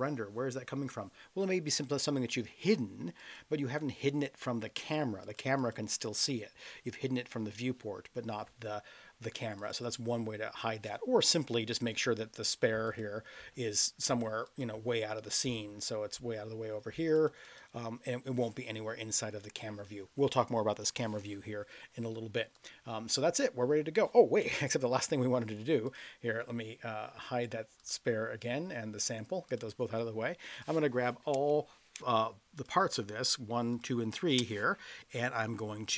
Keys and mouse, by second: 1.7 click, 2.6 click, 3.2 click, 4.8 click, 5.2 click, 5.6 click, 6.0 click, 9.6 click, 12.8 click, 14.1 click, 14.4 click, 17.2 click, 17.4 click, 22.5 click, 24.5 KP_0, 27.8 click, 29.4 click, 30.5 click, 32.5 shift+click, 33.7 shift+click.